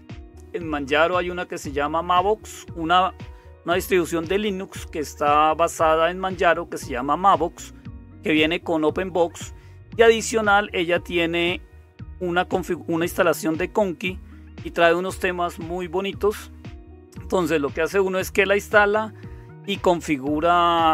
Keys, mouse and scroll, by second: 0.0-20.9 typing.